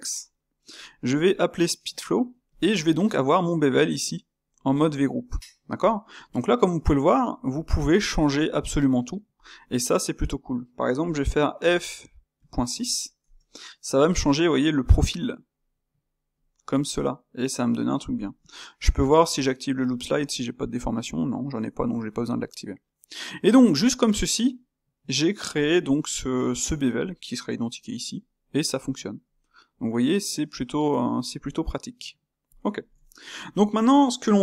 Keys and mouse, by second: 0.5-2.5 middle drag, 2.5 space, 9.6-12.6 middle drag, 14.3-19.7 middle drag, 21.2-29.4 middle drag, 30.2-32.4 middle drag, 32.8-34.4 ctrl+shift+middle drag.